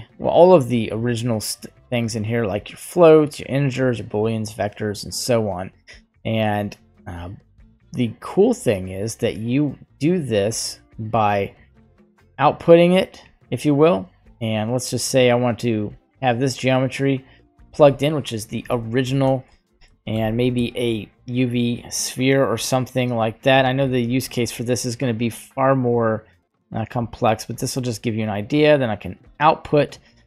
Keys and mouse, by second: 7.3 right click, 8.0 click, 10.9 click, 11.9-13.1 drag, 14.4 click, 15.6-16.8 drag, 17.2 click, 19.7 shift+a, 23.2 typing, 24.1 alt+right click, 25.2 click, 28.8 click.